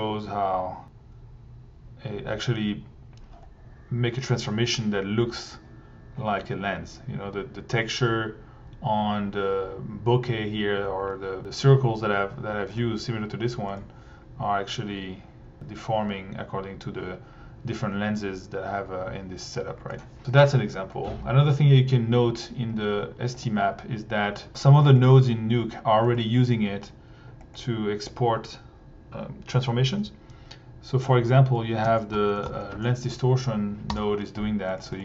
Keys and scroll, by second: 12.8 1, 23.4 1, 31.9 Tab, 31.9-33.0 typing, 33.7 Down, 33.9 Return, 34.9 1.